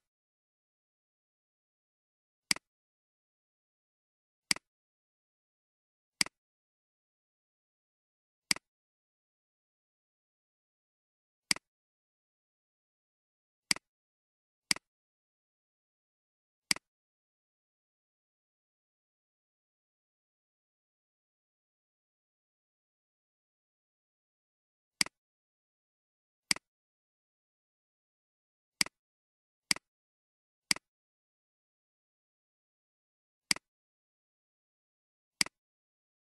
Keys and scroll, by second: 0.6-1.8 typing, 3.2 =, 5.0 *, 6.6 Return, 12.2 Return, 15.3 Return, 18.0-22.4 typing, 22.7 Return, 34.4 shift+=, 36.1 *.